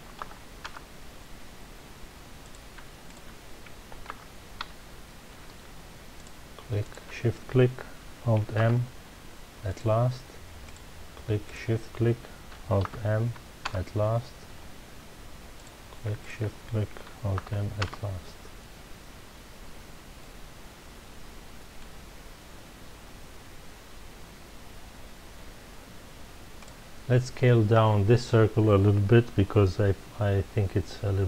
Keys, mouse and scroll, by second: 0.2 alt+m, 1.9 Return, 2.4 click, 3.0 shift+click, 4.1 alt+m, 5.9 Return, 6.1 click, 6.8 shift+click, 8.5 alt+m, 10.6 click, 11.4 shift+click, 12.8 alt+m, 13.9 Return, 14.7-15.2 scroll up 1, 15.5 click, 16.2 shift+click, 17.3 alt+m, 17.9 Return, 19.3-20.2 scroll down 1, 20.2-23.3 middle drag, 26.6 click.